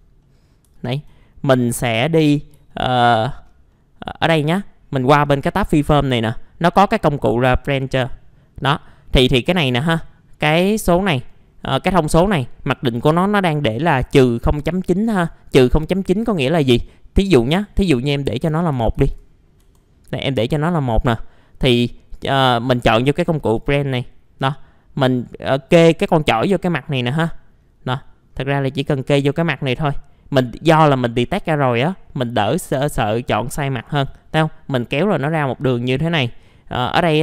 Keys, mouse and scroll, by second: 0.7 alt+middle click, 1.6 alt+middle click, 2.7 alt+middle click, 5.2 click, 18.9 ctrl+a, 19.6 ctrl+1, 20.4 middle click, 21.5-23.1 scroll up 1, 23.4 click, 27.0-27.9 scroll down 1, 27.9 middle click, 28.3 scroll down 1, 31.2-34.1 drag, 34.1 middle click, 35.3 alt+middle click, 36.3-37.2 scroll up 1.